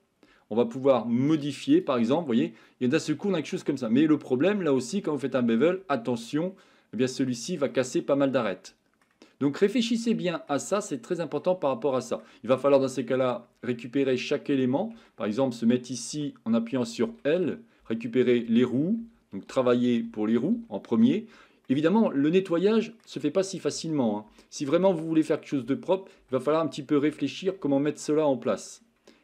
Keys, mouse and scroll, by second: 1.3 click, 2.7-4.9 middle drag, 5.2-5.7 shift+middle drag, 6.6-7.3 middle drag, 8.2-9.0 middle drag, 9.9-10.5 shift+middle drag, 10.8-11.4 middle drag, 11.7-12.2 shift+middle drag, 12.6 middle click, 15.0 Tab, 21.7-23.0 middle drag, 28.1 middle click.